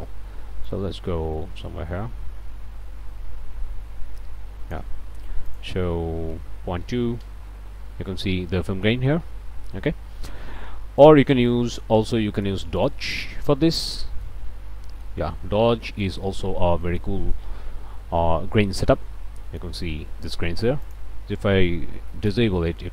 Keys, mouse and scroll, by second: 0.6-4.9 drag, 5.5 click, 6.3 KP_Decimal, 6.8 KP_2, 7.2 KP_Enter, 8.5 click, 11.0 click, 12.8 click, 14.2 click, 15.3 scroll down 2, 16.1 scroll up 2, 18.4-19.3 scroll up 4, 19.3 click, 20.8 click, 22.2 m.